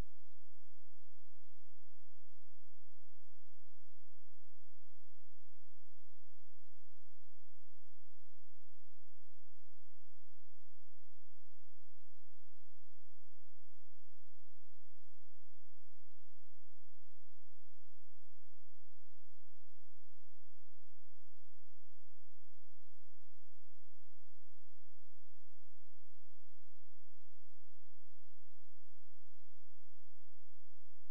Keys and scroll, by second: 16.2 ctrl+a, 17.9 shift+d, 18.6 ctrl+space.